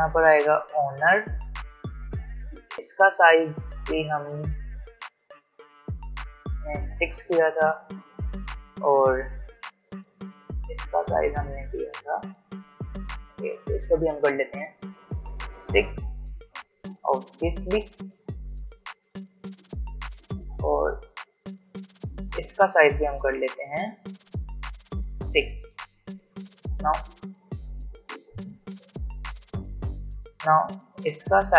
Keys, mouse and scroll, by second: 0.0-2.8 typing, 3.7 click, 8.1-13.1 drag, 17.7 v, 19.2 ctrl+z, 21.2-29.1 drag, 29.1 ctrl+z, 30.8 click.